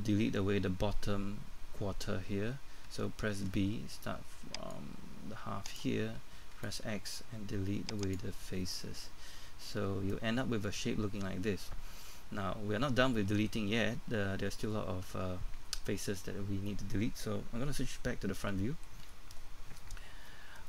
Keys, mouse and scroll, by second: 3.4 b, 4.7-6.5 drag, 8.0 x, 8.8 middle click, 19.0 KP_1, 20.3 middle click.